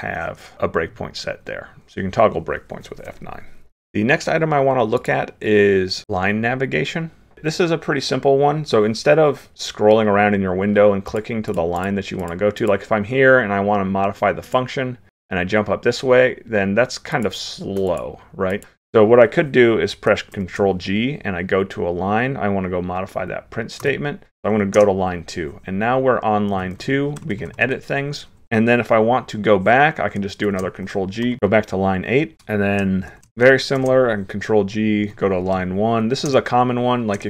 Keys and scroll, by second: 20.4 ctrl+g, 30.5 ctrl+g, 33.1 ctrl+f, 33.8 ctrl+g.